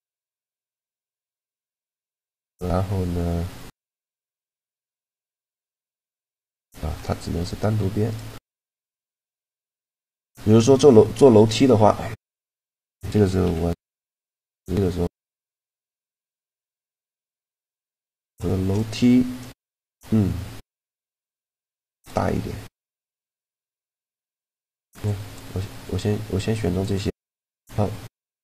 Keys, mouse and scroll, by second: 0.6 middle click, 6.7-8.6 middle drag, 7.0 a, 7.7-10.4 right drag, 9.2-10.5 middle drag, 10.7 middle click, 11.3-13.0 middle drag, 13.0 KP_7, 13.8 a, 14.6-16.3 drag, 15.3 b, 17.2 x, 18.3 b, 19.5-21.1 drag, 20.5 Tab, 21.7 Tab, 23.1-25.1 drag, 24.1 a, 24.5 c, 25.1 middle click, 26.7 right click, 26.9 middle click, 27.1 right click.